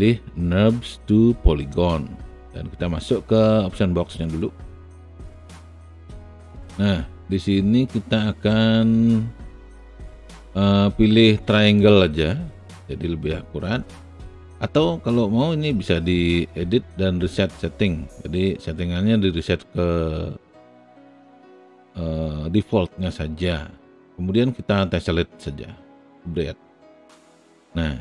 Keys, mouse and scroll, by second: 21.3 click.